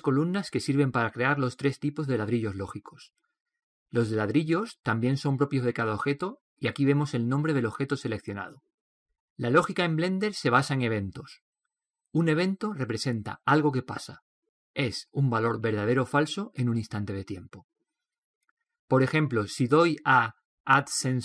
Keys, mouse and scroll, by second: 2.5-21.1 right drag, 21.1 click.